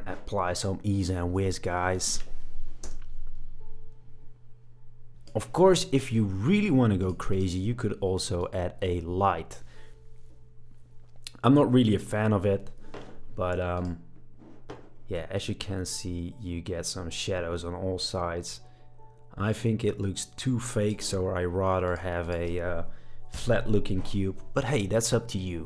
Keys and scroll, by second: 2.8 space, 23.3 BackSpace.